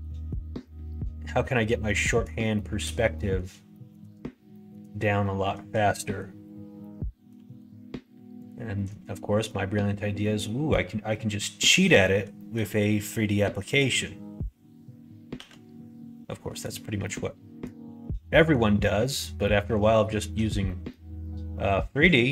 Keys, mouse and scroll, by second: 0.8-2.0 middle drag, 2.5 shift+middle click, 3.1 middle click, 3.7 shift+middle click, 4.4 middle click, 5.1 shift+middle click, 5.9 middle click, 6.7 middle click, 7.4 2, 8.4 click, 9.4 middle click, 10.2 middle click, 11.1 middle click, 11.8 middle click, 12.3 middle click, 13.6 click, 15.3 g, 17.0 middle click, 18.2 middle click, 19.0 middle click, 19.9 shift+middle click, 20.7 middle click, 22.0 click.